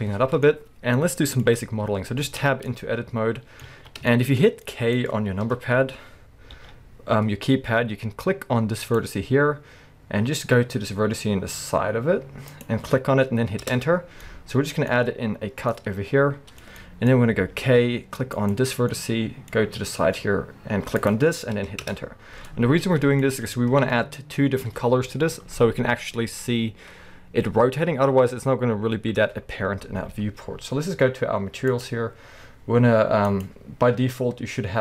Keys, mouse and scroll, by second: 2.3 Tab, 2.7 middle click, 3.7 alt+a, 4.1 shift+middle click, 4.6 middle click, 5.4 KP_1, 6.5 k, 13.8 Return, 14.2 middle click, 17.5 k, 18.9 middle click, 22.0 Return, 22.4 middle click, 23.8 KP_1, 24.1-27.9 middle drag, 30.1-31.7 scroll down 1, 31.7 click, 33.4-34.8 drag.